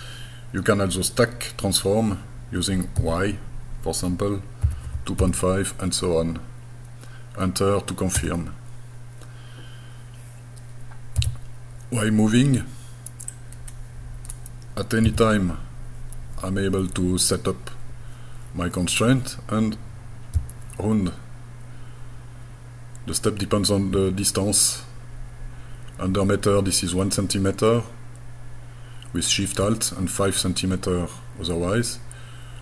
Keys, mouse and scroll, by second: 3.0 y, 4.7 KP_2, 4.9 KP_Decimal, 5.2 KP_5, 8.2 KP_Enter, 11.2 g, 13.3 click, 15.1 x.